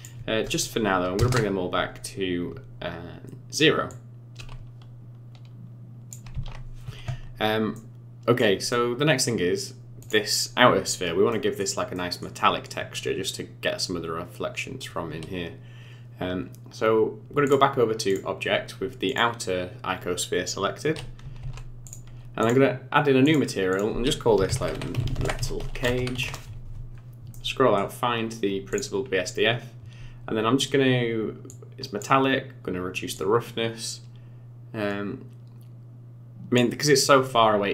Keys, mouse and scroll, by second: 3.8 click, 6.3 ctrl+z, 7.7 middle click, 8.7 middle click, 9.9 click, 10.4-10.8 scroll up 5, 11.2 middle click, 11.9 middle click, 17.4 click, 19.0 click, 21.3 ctrl+s, 22.3 click, 23.2 click, 23.7 click, 26.8 scroll down 5, 27.3 middle click, 28.7 click, 28.9-29.5 scroll up 8, 31.4 click, 33.1 click.